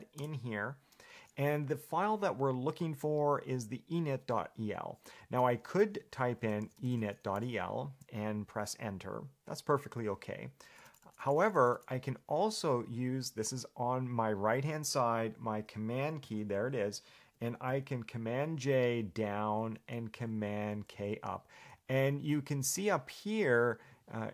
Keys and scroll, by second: 0.4 Return, 6.5-8.1 typing, 10.8 BackSpace, 11.1 Delete, 11.4 Delete, 11.6 Delete, 12.0 Delete, 18.7 ctrl+j, 19.1 ctrl+j, 19.5 ctrl+j, 19.7 ctrl+j, 19.9 ctrl+j, 20.3 ctrl+k, 20.5 ctrl+k, 21.1 ctrl+k, 21.9 ctrl+j, 22.2 ctrl+j.